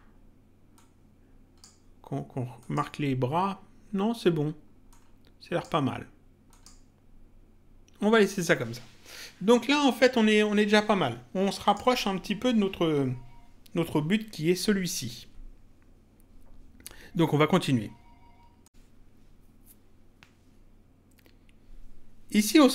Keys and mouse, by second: 0.7 click, 2.5 click, 4.9 click, 6.5 click, 11.6 click, 18.6 click.